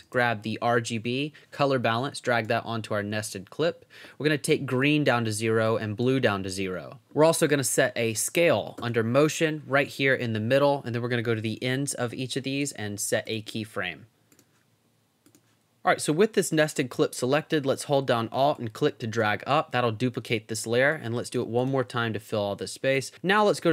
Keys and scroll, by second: 0.0-0.6 typing, 11.5 Up, 13.8 Down.